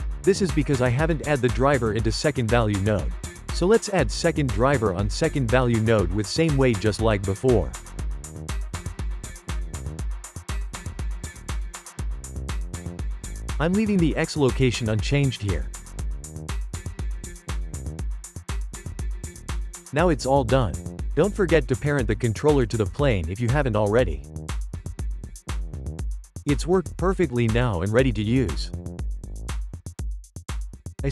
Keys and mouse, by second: 1.9-3.4 shift+middle drag, 3.4-5.4 right drag, 9.7-12.3 right drag, 19.0 g, 20.7 click, 21.7 click, 22.8 n, 24.1 click, 25.0-28.2 ctrl+middle drag, 28.2 g.